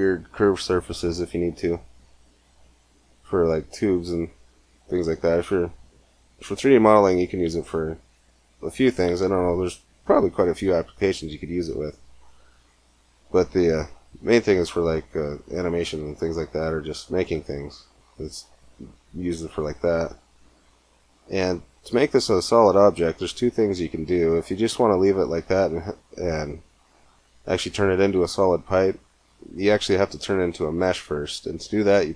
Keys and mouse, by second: 2.0 middle click, 23.3 Tab.